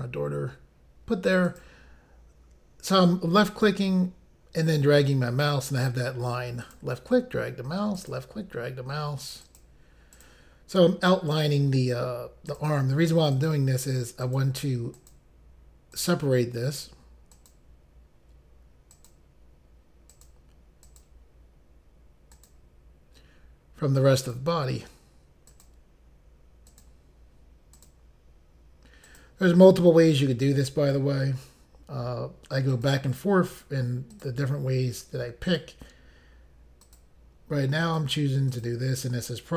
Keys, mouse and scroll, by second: 1.4 click, 3.5 click, 6.6 click, 8.0 click, 9.4 click, 10.2 click, 11.3 click, 12.5 click, 13.4 click, 14.2 click, 16.0 click, 17.3 click, 19.1 click, 20.1 click, 20.9 click, 22.3 click, 24.2 click, 25.5 click, 26.7 click, 27.8 click, 29.1 click, 32.7 click, 34.1 click, 35.5 click, 36.9 click, 37.9 click.